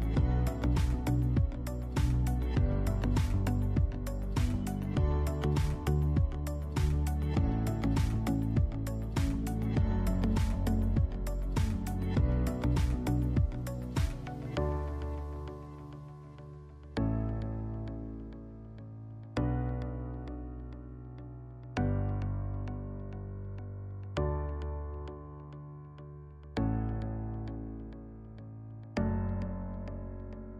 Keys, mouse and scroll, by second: 0.0 e, 0.9 click, 1.1 s, 1.8 click, 2.1 e, 2.8 click, 3.1 s, 3.7 click, 3.9 shift+middle click, 4.2-9.0 middle drag, 12.9-15.2 middle drag, 21.5-21.8 scroll down 2, 21.8-24.1 shift+middle drag, 22.4-23.1 scroll down 3, 23.8 Tab, 24.1 click, 24.7 KP_1, 25.1-25.4 scroll down 2, 25.4-28.5 shift+middle drag, 25.8 scroll up 1, 26.1 shift+a, 27.9 s, 28.5 click, 28.9 g, 29.6 click, 29.7-30.2 scroll up 1, 30.2-30.5 shift+middle drag.